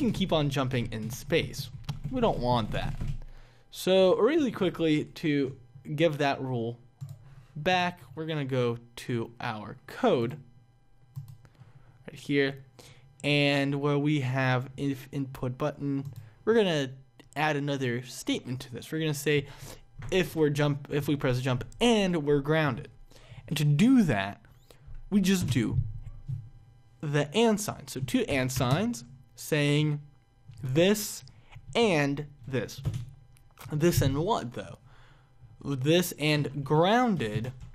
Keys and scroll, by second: 37.4 BackSpace.